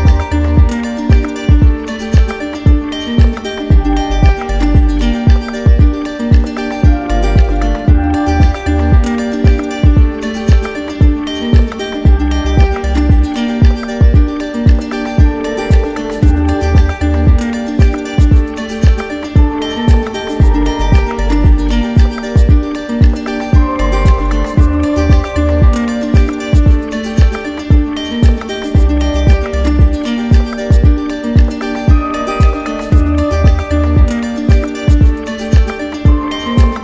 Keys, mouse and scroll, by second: 3.6 click, 4.9 ctrl+click, 8.9 ctrl+click, 9.3 shift+click, 10.6 click, 13.2 click, 14.8 click, 15.7 ctrl+d, 16.7 ctrl+z, 18.6-19.7 drag, 27.8-28.8 right drag, 29.6-30.6 drag, 32.0 click, 35.5 click.